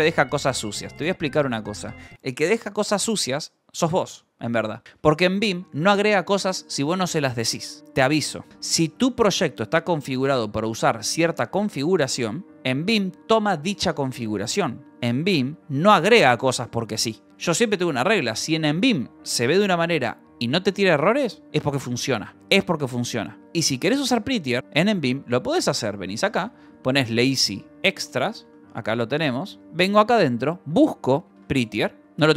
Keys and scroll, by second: 5.3 k, 18.7 Escape, 26.0-28.9 typing, 29.6 Return, 30.2-32.3 typing.